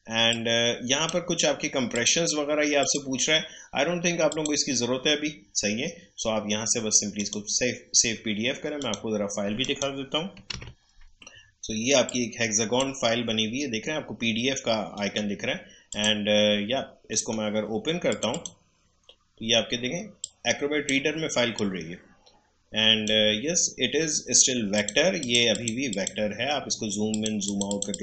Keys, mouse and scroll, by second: 7.1 click, 10.5 super+d, 12.0-14.9 drag, 14.9 right click, 15.9 click, 17.1 right click, 18.1 click, 19.0-24.7 drag.